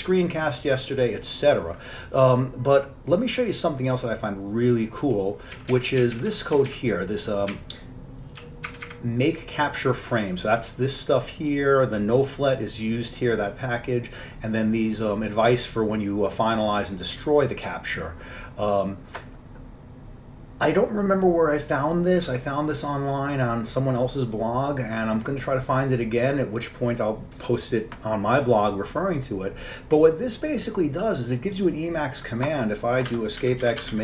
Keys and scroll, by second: 5.7 Down, 6.1 Down, 6.5 Down, 6.7 Down, 7.6-8.4 Down, 8.8 Up, 8.9 Up, 33.2 Escape, 33.3-34.0 typing.